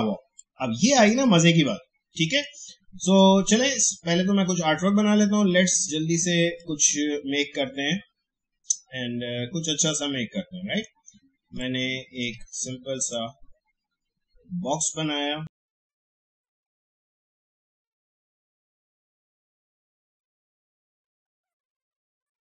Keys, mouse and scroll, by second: 0.3 click, 0.4-2.3 drag, 6.6-13.0 drag, 15.7 click, 17.4 alt+scroll up 1, 17.6 click, 19.1 click, 19.7 shift+Up, 20.0 click, 22.0 click.